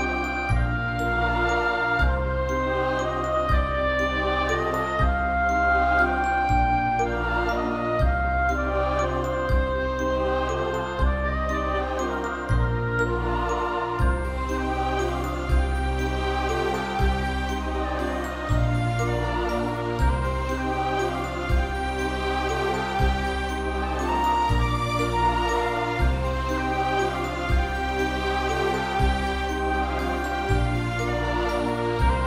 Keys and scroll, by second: 8.4 ctrl+=, 8.5 ctrl+=, 8.7 ctrl+=, 9.0 space, 10.5 space, 11.2 [, 13.6 space, 15.5 space, 18.6 space, 20.6 space.